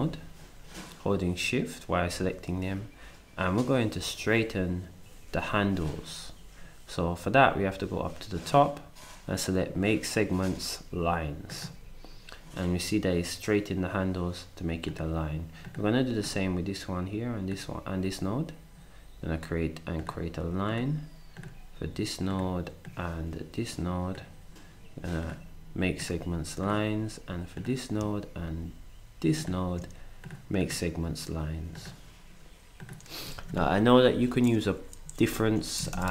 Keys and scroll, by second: 35.8 alt+Up.